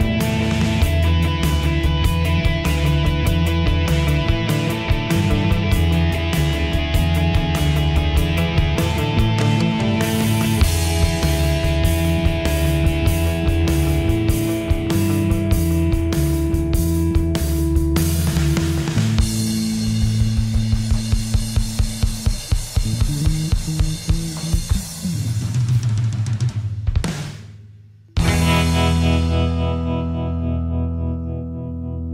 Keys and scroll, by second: 21.6 ctrl+j, 28.7 ctrl+j.